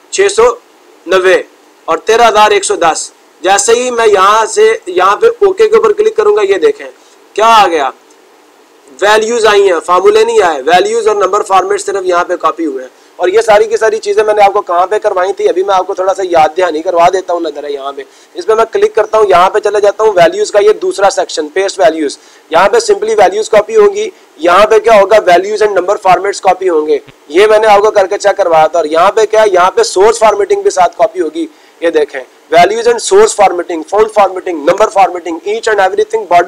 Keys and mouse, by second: 5.4-6.6 drag, 9.0 click, 9.5 click, 9.6 click, 11.7 click, 12.4 click, 18.1-19.1 drag, 20.3-21.4 drag.